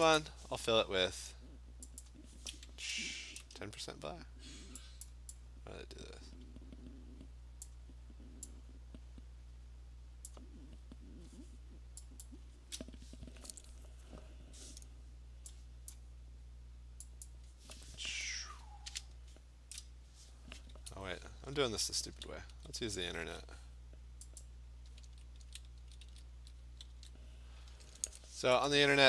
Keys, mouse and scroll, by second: 0.2 click, 2.0 click, 3.1-3.9 typing, 5.1 click, 7.7 click, 10.3 click, 12.2 click, 15.9 click, 17.3 click, 20.9 Escape, 21.9 ctrl+alt+z, 22.2 ctrl+alt+z, 22.5 ctrl+alt+z, 22.8 ctrl+alt+z, 23.2 ctrl+alt+z, 24.4 click, 25.1 ctrl+z, 25.4 ctrl+z, 25.8 ctrl+z, 26.1 ctrl+z, 26.9 ctrl+d, 28.7 click.